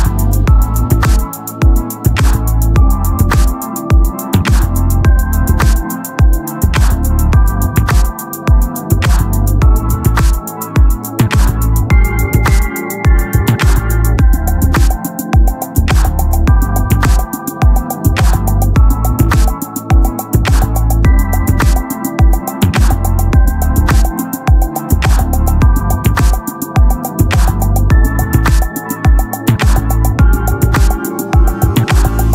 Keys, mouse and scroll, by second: 0.7 ctrl+r, 2.6 Tab, 4.2-5.4 drag, 12.0 KP_1, 17.6-18.8 drag, 17.6 shift+a, 18.8 KP_7, 20.1-21.4 drag, 20.4 z, 21.0 s, 23.2 Tab, 24.1 ctrl+Tab, 24.6 z, 24.7 click, 26.0 KP_7, 27.9 alt+m, 30.2 alt+m, 31.7 KP_7.